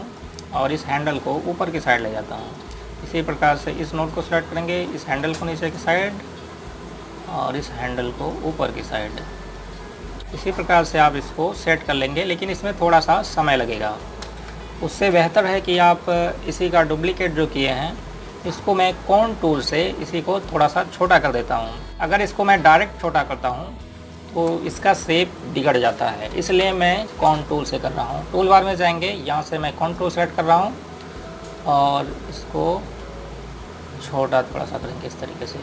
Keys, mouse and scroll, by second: 15.1 ctrl+space, 15.6-16.4 scroll down 1, 16.4 Delete, 16.9 click, 17.4-19.4 scroll up 1, 22.5 click, 22.9 click, 23.9 click, 24.5 right click, 27.3 Delete, 27.6 click, 32.9 click.